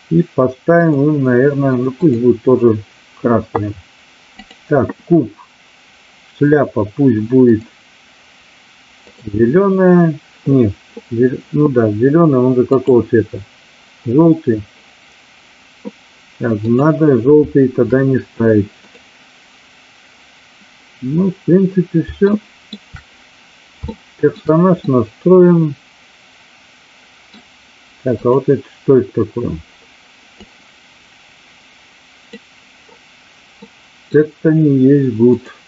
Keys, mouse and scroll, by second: 0.8 click, 1.9 click, 9.0 click, 12.9 click, 16.5 click, 18.8 click, 22.3 shift+middle click, 23.8-24.3 shift+middle drag, 24.8-27.1 middle drag, 30.3-32.4 drag, 33.5 middle click.